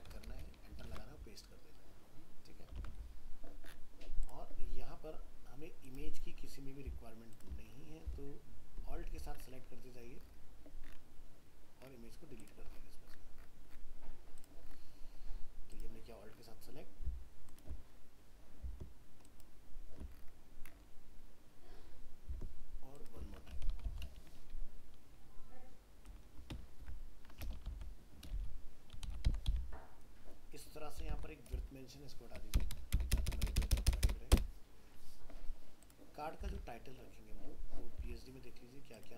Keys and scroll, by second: 0.8 ctrl+v, 36.5 alt+Tab.